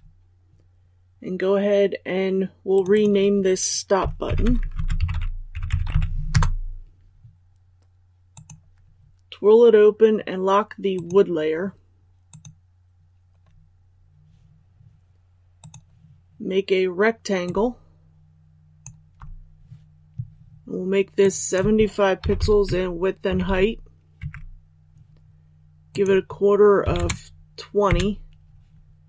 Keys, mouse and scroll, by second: 5.5 space, 6.3 Return, 8.3-18.8 drag, 21.2-22.5 drag, 22.6 Tab, 25.9-29.0 drag.